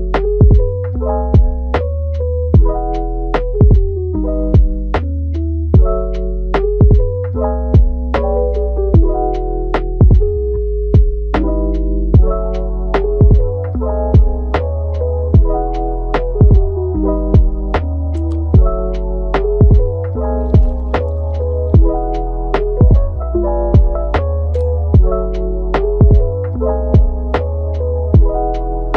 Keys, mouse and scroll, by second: 1.8 scroll down 1, 2.0-5.1 middle drag, 6.7 scroll up 1, 6.7-8.3 middle drag, 8.3 scroll down 1, 8.5-9.5 middle drag, 9.5 Tab, 10.2-14.8 middle drag, 14.8 scroll up 1, 15.1-15.7 middle drag, 15.7 click, 16.6 drag, 17.5 a, 19.7 ctrl+t, 21.5 click, 22.3 g, 23.9 middle click, 24.6 g, 25.8-27.0 middle drag, 27.0-27.3 scroll down 1, 27.3-27.7 middle drag, 27.7 Tab, 28.1 middle click, 28.6 shift+d.